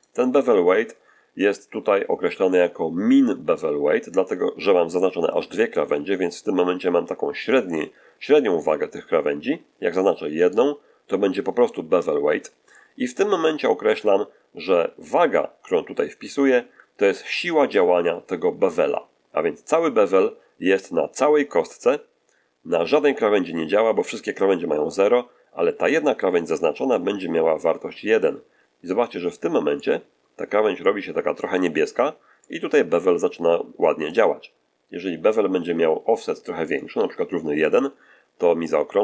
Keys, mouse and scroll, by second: 10.3 right click, 26.9-29.1 drag, 29.7-31.7 middle drag, 31.8-32.2 scroll up 1, 32.3-34.2 middle drag, 34.4 scroll down 1, 36.6 click, 36.9 1, 37.6 click, 38.5 middle click.